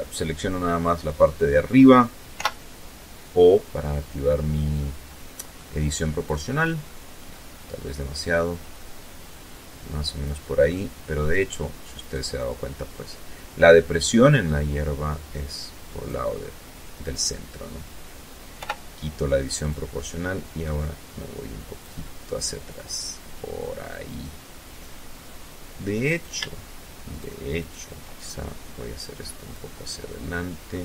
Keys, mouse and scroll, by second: 1.0 o, 3.4 middle click, 4.9 click, 5.9-6.9 scroll up 1, 6.9-7.3 scroll down 1, 9.3 middle click, 10.6 right click, 11.0 middle click, 12.6-14.9 drag, 15.8 right click, 17.2 o, 18.3-20.6 drag, 20.6-23.3 middle drag, 24.7 shift+right click, 25.7 shift+right click, 26.2 shift+right click, 26.9-28.4 shift+drag, 28.4-29.5 middle drag, 30.7 ctrl+z.